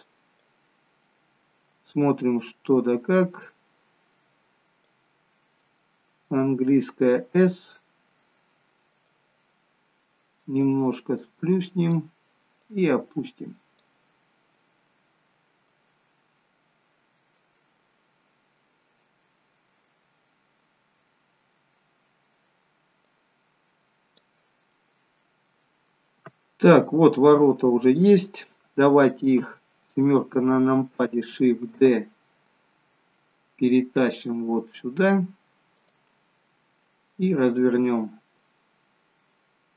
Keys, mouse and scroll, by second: 1.0 middle click, 2.0-3.5 scroll up 6, 3.5 click, 7.4 s, 10.6 click, 12.6 click, 14.5 middle click, 15.3 scroll down 2, 16.8 scroll down 1, 17.0 middle click, 17.9 middle click, 19.0 middle click, 20.5-21.1 scroll up 4, 21.2 middle click, 23.0 click, 24.8 middle click, 25.8-26.7 scroll down 4, 26.7 middle click, 28.4-28.9 scroll down 1, 29.4 KP_7, 32.1 shift+d, 37.6 click.